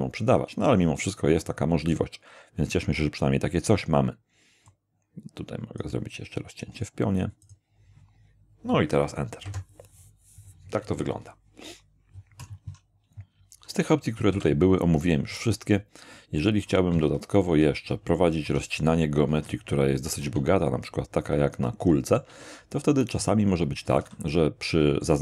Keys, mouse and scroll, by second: 1.4 click, 4.7-6.0 drag, 7.4 click, 9.4 Return, 14.3 k, 16.9 Escape, 17.5 Escape, 18.5 Tab, 19.3 x, 19.5 click, 20.1 shift+a, 21.3 shift+click, 21.8 shift+middle click, 22.3 shift+Tab, 22.7 shift+middle click, 22.9 shift+click, 24.0 shift+a, 24.3 shift+click.